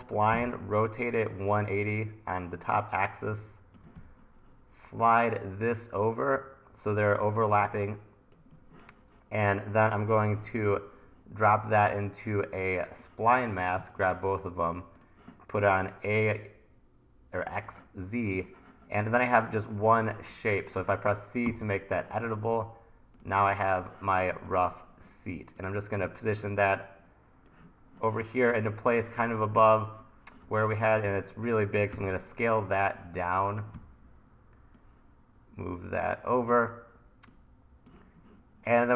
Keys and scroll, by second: 0.3 r, 4.0 e, 8.8 super+z, 10.3 super+y, 21.5 c, 30.5 t, 31.0 r, 31.9 t, 33.8 e.